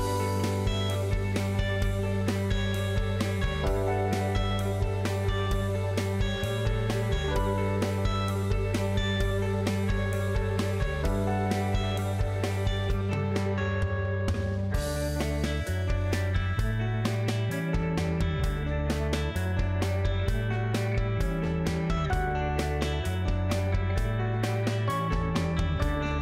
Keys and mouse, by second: 0.7 click, 1.4-4.2 drag, 5.5 Tab, 6.0 Tab, 8.5 alt+a, 9.8 ctrl+a, 11.6 click, 12.5 click, 15.1 ctrl+a, 18.3 click, 18.9 Tab, 19.4 middle click, 20.8 KP_7, 22.3 middle click, 22.9 alt+z, 23.6 alt+click, 24.8 middle click, 25.6 middle click.